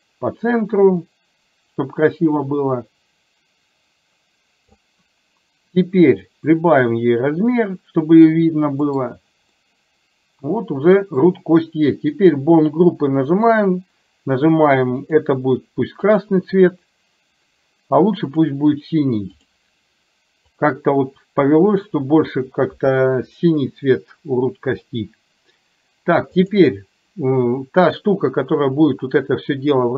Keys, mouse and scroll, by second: 6.4-8.6 drag, 9.0 middle click, 9.1 scroll down 1, 9.7-11.2 middle drag, 11.2 scroll down 1, 12.2 click, 15.2-16.4 drag, 18.4-19.6 drag, 20.6 click, 26.6 click.